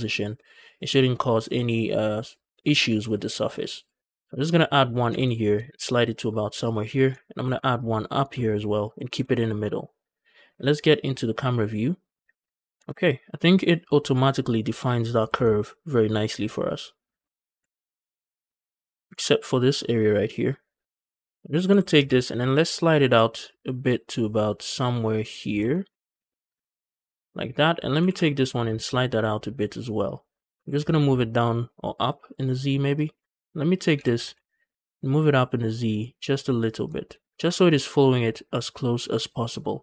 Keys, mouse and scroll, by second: 3.6 right click, 3.9 scroll up 2, 4.0 scroll down 1, 4.1 shift+middle click, 4.9 g, 5.1 g, 6.5 shift+click, 7.5 ctrl+r, 8.7 shift+click, 8.7 shift+right click, 9.2 shift+middle click, 10.3 KP_0, 12.1 scroll up 1, 12.4 shift+middle click, 12.5 click, 12.5 scroll down 2, 12.6 Tab, 15.0 scroll down 2, 15.3-17.0 shift+middle drag, 17.4 z, 18.3-19.0 scroll up 5, 19.0 Tab, 21.0 click, 21.4 g, 21.6 g, 25.0 shift+click, 25.3-26.0 scroll up 4, 25.6 shift+middle click, 26.1 shift+middle click, 26.8 shift+middle click, 27.5 click, 27.9 g, 28.0 g, 28.2 e, 29.9 shift+click, 30.4 g, 30.6 z, 32.8 shift+click, 33.2 click, 33.6 click, 33.8 g, 34.0 z, 36.7 shift+click, 37.2 scroll down 1, 37.3 Tab.